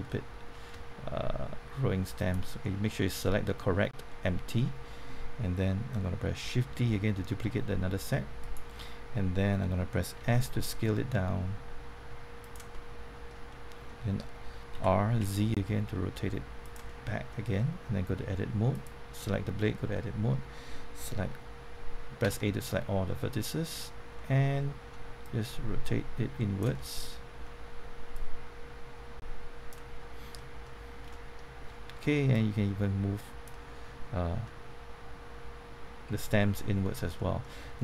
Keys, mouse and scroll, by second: 0.0 middle click, 2.2 shift+click, 3.0 middle click, 6.8 shift+d, 8.4 right click, 10.2 s, 12.4 click, 12.7 middle click, 14.4-15.7 typing, 16.6 click, 16.8 middle click, 18.2 Tab, 18.7 click, 19.2 Tab, 19.9 middle click, 22.2 typing, 22.7 middle click, 25.2-26.7 drag, 26.7 middle click, 28.1-30.3 drag, 30.3 middle click, 30.9 scroll up 1, 31.1 middle click, 32.3-33.4 drag, 34.4-36.9 middle drag, 36.9 scroll up 1, 37.1 middle click.